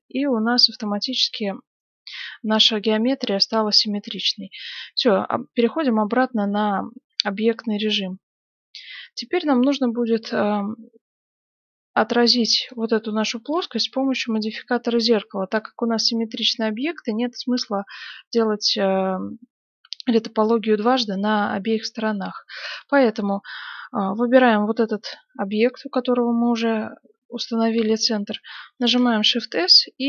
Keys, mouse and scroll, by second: 1.0-4.0 middle drag, 4.0 Tab, 5.3 middle click, 6.1 t, 6.8-9.1 middle drag, 9.9-11.6 middle drag, 12.6 right click, 13.1-14.8 middle drag, 24.3 right click, 27.2-29.0 middle drag, 28.8 shift+s.